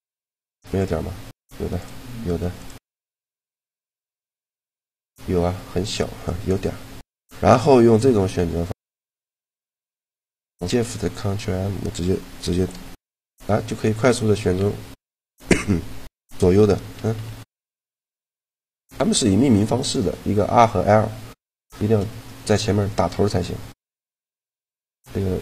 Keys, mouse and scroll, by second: 0.4-4.3 right drag, 4.4-8.3 right drag, 7.3 click, 8.3-9.4 drag, 12.9 ctrl+shift+m, 16.4 ctrl+shift+m, 16.7 ctrl+shift+m, 17.0 ctrl+shift+m, 17.1 ctrl+shift+m, 17.4 ctrl+shift+m, 17.6 ctrl+shift+m, 17.9 ctrl+shift+m, 21.3 click, 25.1-25.4 drag.